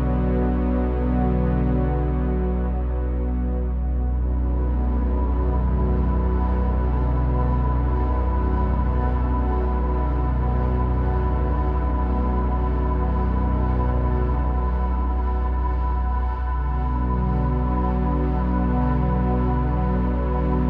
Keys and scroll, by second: 2.1 q, 5.8 Tab, 5.9 Tab, 8.3 q, 12.9 super+z, 14.3 e, 15.9 e, 18.3 q, 19.0 q.